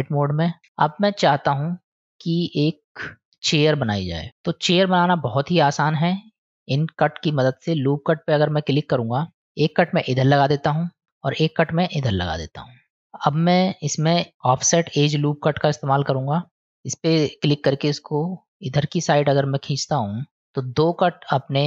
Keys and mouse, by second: 0.6 Tab, 0.6 middle click, 1.3 click, 2.3 middle click, 4.1 middle click, 5.4 middle click, 7.1 click, 12.0 click, 13.0 click, 13.7-15.4 drag, 16.7 ctrl+z, 17.4-21.6 drag.